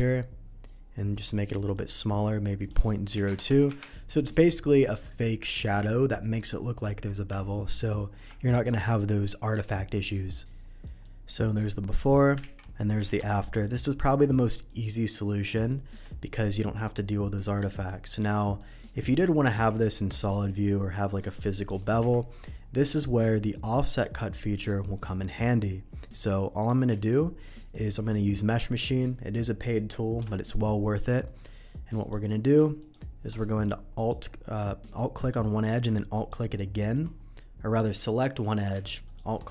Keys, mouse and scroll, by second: 1.2 middle click, 1.5 middle click, 1.8 middle click, 2.6 click, 3.2 KP_0, 3.3 KP_0, 3.5 KP_2, 3.6 Return, 4.4 middle click, 7.7 ctrl+right click, 10.8 middle click, 11.2-11.7 middle drag, 12.4 ctrl+z, 13.0 alt+a, 13.6 middle click, 14.6 middle drag, 15.7 shift+middle drag, 16.1 shift+click, 17.5 shift+middle drag, 18.0-18.5 shift+middle drag, 19.6 z, 21.5 click, 21.9 Delete, 22.7 click, 23.8 click, 24.9 click, 26.5 click, 26.9 Tab, 27.5 middle click, 31.1 middle click, 31.9 click, 32.7 alt+click, 33.9 alt+click, 36.1 click, 38.0 alt+click, 39.0 alt+click.